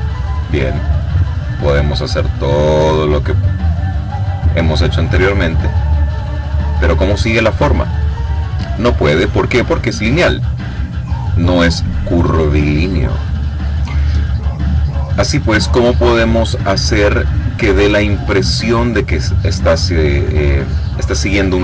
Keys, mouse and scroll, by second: 1.2-3.0 drag, 3.3 click, 4.0 click, 5.6-7.3 drag, 14.5 click, 15.5-17.2 drag, 19.2 click.